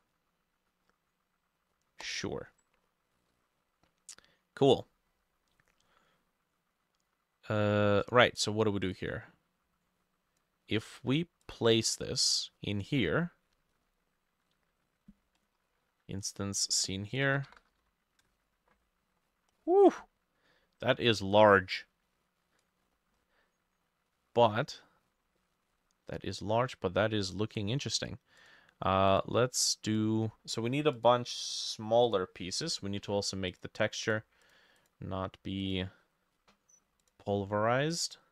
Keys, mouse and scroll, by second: 8.3 right click, 12.4 middle click, 13.5-15.2 scroll down 3, 15.4 right click, 17.0-18.3 typing, 19.3-21.0 scroll down 9, 22.8-24.1 scroll up 6, 24.1 middle click, 25.1-25.4 scroll down 2, 25.4 middle click, 25.7-27.0 scroll up 5, 34.5 double click, 34.8 double click.